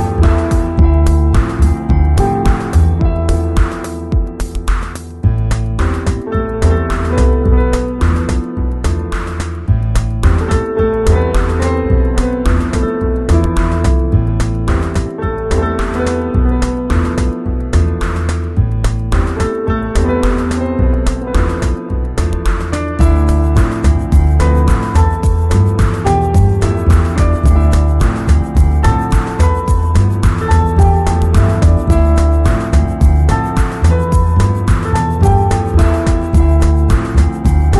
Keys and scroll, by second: 0.9 x, 6.9 ], 8.3 space, 12.4 space, 13.8 x, 16.0 z, 17.5 v.